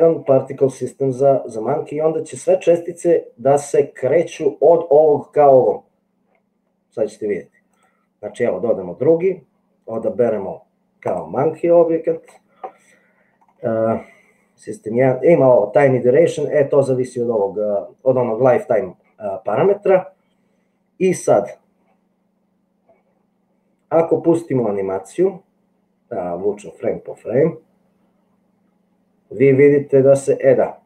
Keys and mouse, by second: 10.1 click, 25.2 click, 26.0-29.7 middle drag.